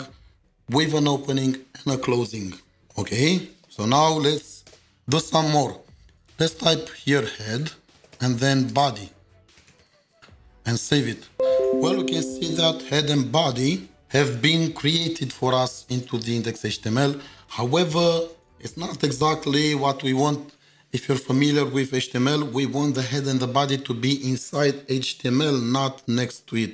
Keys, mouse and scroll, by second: 2.8 ctrl+shift+2, 5.4 Return, 6.4-8.1 typing, 8.1 Return, 9.3-10.6 typing.